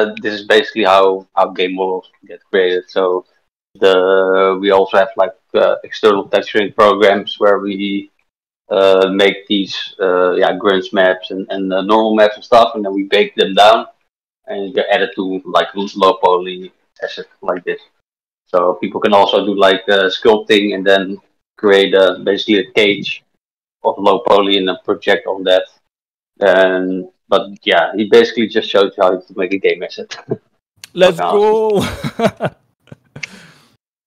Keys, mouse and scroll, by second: 6.2 shift+middle click.